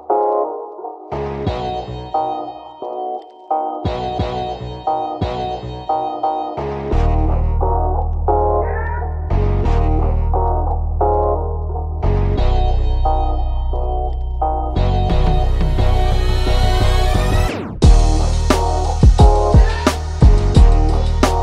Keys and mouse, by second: 1.7-3.5 drag, 3.5 ctrl+z, 4.1-6.1 alt+drag, 6.4 click, 7.5-12.0 drag, 12.9 click, 15.9-19.2 drag, 19.2 ctrl+z, 19.5-21.4 drag.